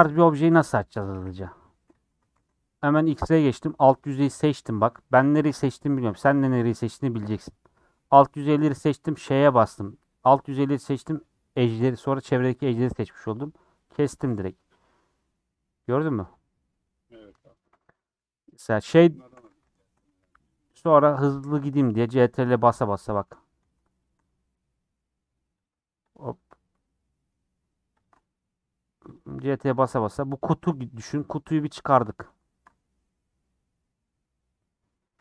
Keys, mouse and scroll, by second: 1.1 KP_1, 2.3 alt+z, 3.2 Left, 4.0 Left, 9.2 ;, 14.4-19.0 middle drag, 19.0 click, 19.5 alt+z, 19.8 shift+middle click, 20.5 ctrl+click, 21.2 ctrl+click, 22.1 ctrl+click, 22.6-23.7 middle drag, 23.7 click, 24.6-25.6 middle drag, 25.6 Left, 26.8-28.0 middle drag, 28.0 ctrl+Left, 28.5 middle click, 29.1 click, 30.1-31.7 middle drag, 31.7 click, 33.0-34.6 middle drag, 34.6-35.2 scroll up 4, 34.9 middle click.